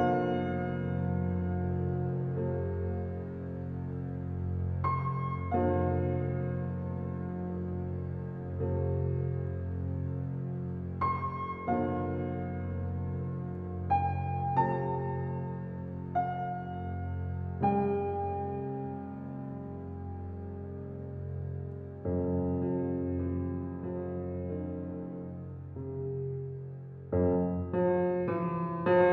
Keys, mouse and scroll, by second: 14.0 click, 19.1 click, 21.8 click, 22.1 alt+click, 24.4-29.1 drag.